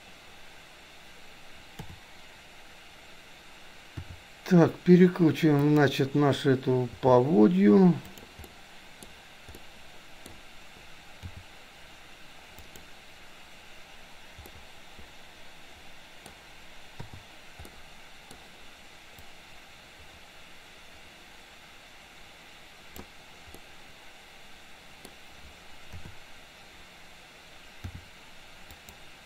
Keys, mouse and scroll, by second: 1.8 KP_7, 4.0 r, 7.1 g, 8.5-9.2 middle drag, 8.5-9.0 scroll up 1, 9.6-10.0 scroll up 1, 10.0-10.3 middle drag, 11.3 g, 14.5-15.1 scroll up 1, 15.1-16.2 middle drag, 16.2 scroll down 1, 17.1 i, 17.7-18.5 middle drag, 19.2-23.2 drag, 23.6-25.2 middle drag, 26.0 KP_7, 28.0 r.